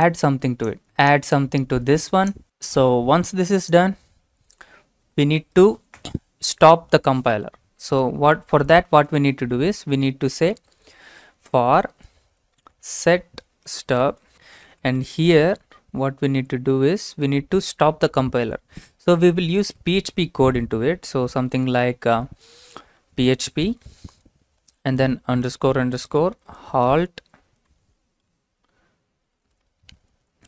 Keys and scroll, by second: 5.0 Return, 8.7-17.1 typing, 15.9 Left, 19.6 typing, 21.4 typing, 22.6-29.2 typing.